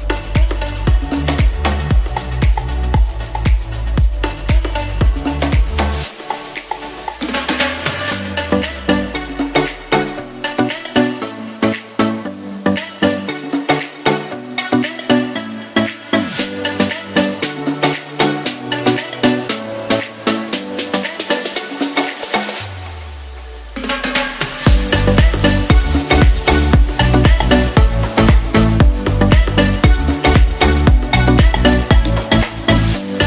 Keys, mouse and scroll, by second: 2.2 ctrl+r, 7.9 z, 13.7 g, 14.2 x, 14.8 g, 14.9 y, 17.4 ctrl+z, 18.9 g, 19.0 y, 20.1 g, 20.1 x, 21.6 g, 21.7 y, 22.8 g, 23.1 x, 24.3 g, 24.5 y.